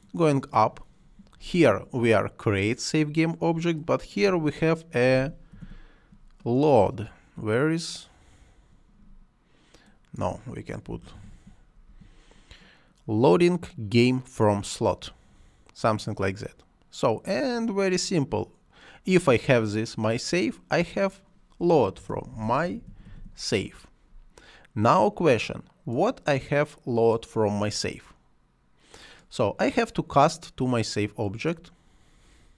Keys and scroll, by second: 4.7-6.0 typing, 10.6-11.7 typing, 21.9-23.5 typing, 32.4-32.5 typing.